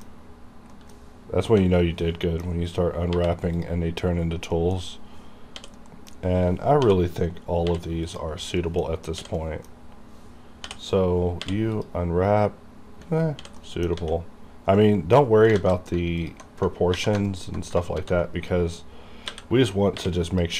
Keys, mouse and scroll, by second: 1.6 l, 2.1 middle click, 3.2 u, 3.6 click, 4.3 typing, 4.3 scroll down 1, 4.6 middle click, 5.6 h, 5.8-6.8 scroll down 1, 6.8-7.7 typing, 8.1 click, 8.7 middle click, 9.4 middle click, 10.6 l, 11.5 l, 11.8 click, 13.5 h, 13.7 middle click, 14.0 a, 14.4 scroll up 1, 14.8 middle click, 14.9 middle click, 15.6 alt+a, 16.3 alt+click, 17.0 2, 17.4 alt+click, 18.0 ctrl+e, 18.5 click, 19.3-20.0 typing, 20.3 click.